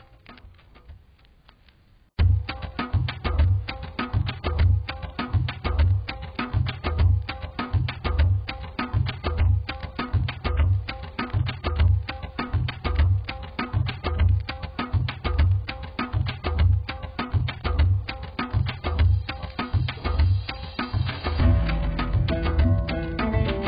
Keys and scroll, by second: 19.5 b, 21.3 ].